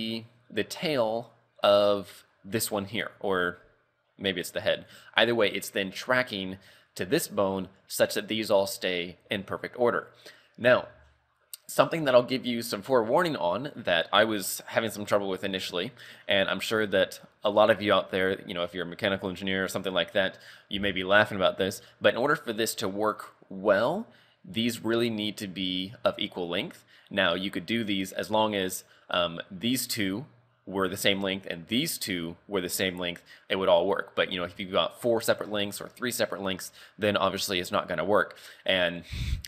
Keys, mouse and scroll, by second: 1.2 right click, 3.0 right click, 4.8 right click, 8.2 right click, 10.2 scroll up 3, 10.7 r, 17.0-18.3 scroll down 3, 21.2-22.8 scroll up 1, 33.5-33.9 scroll up 3, 36.5-37.0 scroll down 3.